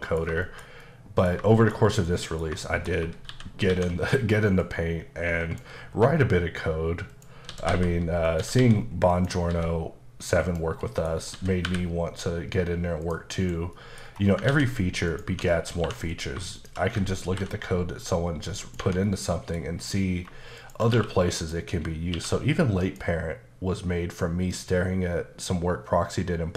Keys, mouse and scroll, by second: 0.4 shift+middle click, 1.5 shift+middle click, 2.6 shift+middle click, 3.3 shift+c, 3.9 a, 4.6 click, 5.9 s, 7.1 click, 7.5-9.5 typing, 8.3 click, 9.1 click, 10.4 click, 10.8 middle click, 11.1 scroll up 2, 11.3-11.7 typing, 13.0 click, 13.4 KP_Decimal, 13.7 middle click, 14.1-14.4 scroll up 2, 14.5 ctrl+a, 15.1 click, 15.3 Tab, 15.8 2, 16.1 click, 16.6 shift+click, 17.3 ctrl+b, 18.6 click, 18.8 Tab, 19.1 middle click, 20.2 scroll down 1, 20.6 shift+click, 20.9 q, 21.4 click, 22.1 q, 22.9 click.